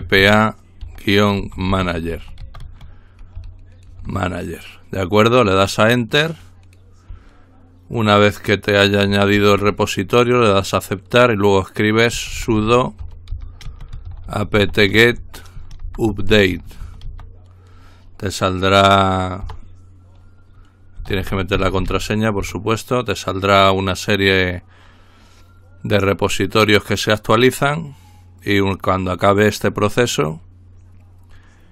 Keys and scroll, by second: 0.0-2.7 typing, 4.0 typing, 6.2 typing, 11.9-17.5 typing, 19.4 Return, 20.7-22.4 typing.